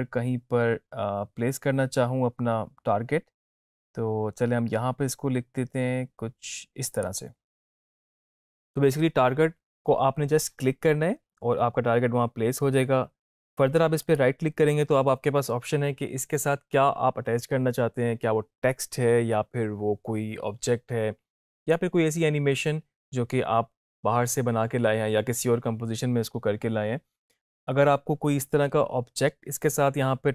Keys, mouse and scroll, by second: 7.0 click, 14.1 right click.